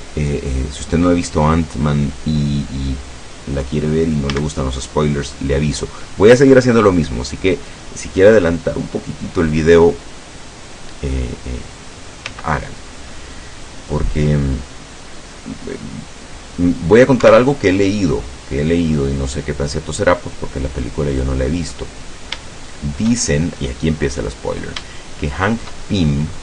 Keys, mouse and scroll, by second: 4.3 a, 12.4 c, 13.4-17.3 drag, 17.3 Escape, 17.5 middle click, 18.5 scroll down 1, 19.4-21.5 drag, 21.5 scroll down 1, 21.7-23.8 middle drag, 24.0-24.4 shift+scroll up 1, 25.0 shift+middle click, 26.2 middle click.